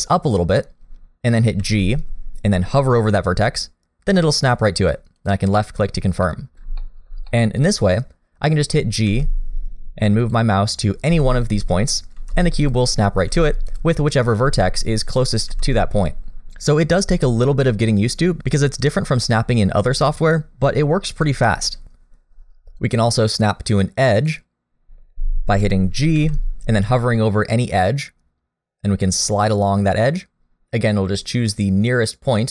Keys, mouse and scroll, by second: 1.6 g, 5.8-6.4 scroll down 2, 6.3 middle click, 6.8 shift+middle click, 7.3 middle click, 9.1 g, 11.1 g, 13.3 g, 14.4 g, 15.5 g, 22.8 click, 26.1 g.